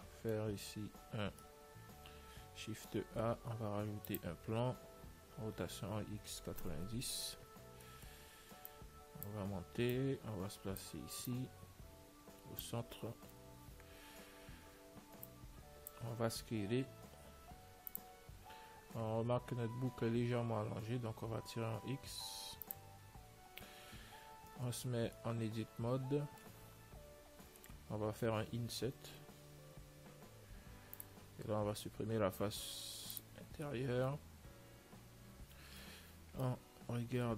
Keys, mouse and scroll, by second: 2.0-3.2 middle drag, 3.2 shift+a, 5.7 r, 8.1-9.9 middle drag, 9.0-13.4 drag, 14.4-15.6 middle drag, 15.6 click, 18.7-21.4 middle drag, 18.9 z, 20.2 z, 21.4 s, 24.0-25.2 middle drag, 24.8 Tab, 25.5-29.8 middle drag, 33.9-37.3 middle drag, 37.3 z.